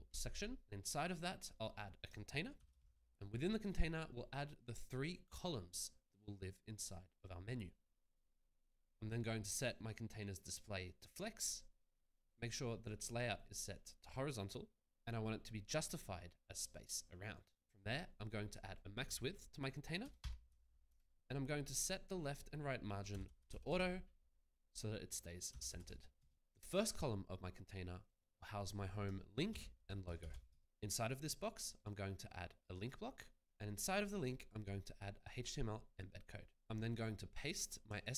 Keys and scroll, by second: 2.5-3.3 typing, 20.0-21.3 typing, 22.8-24.0 typing, 25.2-26.4 typing, 29.7-30.5 typing.